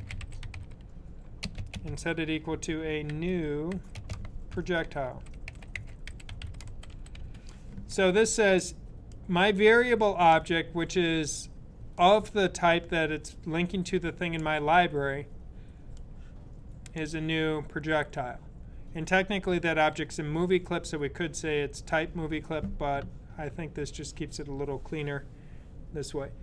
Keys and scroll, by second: 0.0-7.5 typing.